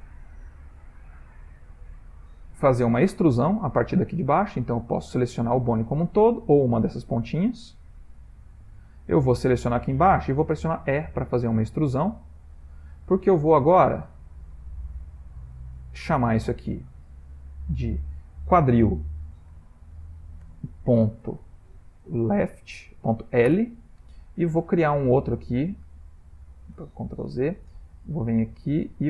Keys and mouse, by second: 0.2 click, 4.2 shift+middle click, 4.3 shift+middle click, 4.5 shift+middle click, 4.5 shift+middle click, 4.9 click, 6.5 click, 7.0 g, 8.1 click, 8.4 g, 10.3 middle click, 11.0 e, 13.3 shift+middle click, 17.4 click, 19.4 F2, 21.2 BackSpace, 21.4 BackSpace, 25.4 e, 27.4 ctrl+z, 27.9 click, 28.7 click.